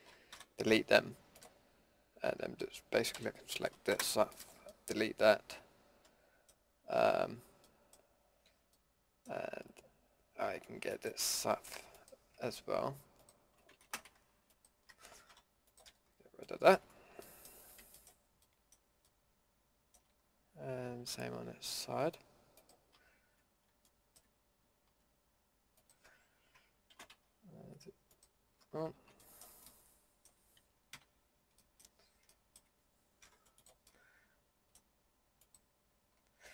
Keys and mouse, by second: 0.3 Delete, 3.1 l, 3.9 Delete, 8.2-8.7 middle drag, 10.9 middle click, 11.5 a, 13.8 ctrl+z, 15.3 Delete, 18.5-22.6 middle drag, 22.6-24.3 drag, 26.9 ctrl+z, 29.0 ctrl+z, 30.9 KP_Decimal, 31.7 middle drag, 33.2 Delete.